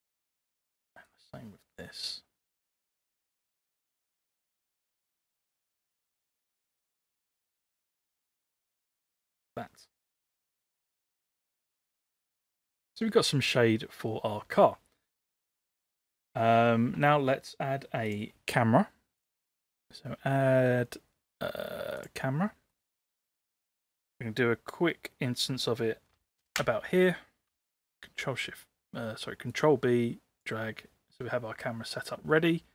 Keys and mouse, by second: 0.1 click, 1.0 click, 5.1-9.1 drag, 10.6 middle click, 11.8-12.7 middle drag, 18.0 click, 19.3-22.1 drag, 22.8 middle click, 24.0-25.3 middle drag, 26.4 ctrl+alt+KP_0, 27.8 ctrl+b.